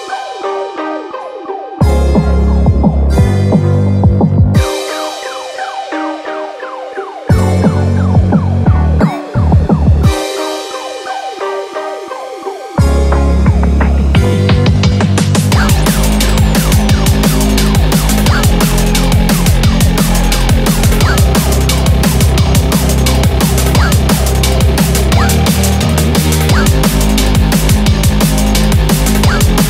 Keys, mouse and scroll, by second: 0.0 click, 0.0-0.3 scroll down 1, 0.3 scroll down 1, 1.3 1, 1.9 scroll down 2, 2.5 shift+middle click, 21.1 scroll down 1, 21.5 shift+middle click, 22.0 scroll up 2, 22.3 shift+middle click, 23.1 scroll down 1, 23.5 click, 23.8 click, 24.8 2, 24.9 click, 25.5 shift+click, 25.8 shift+click, 25.8 right click, 26.7 shift+click, 27.1 right click.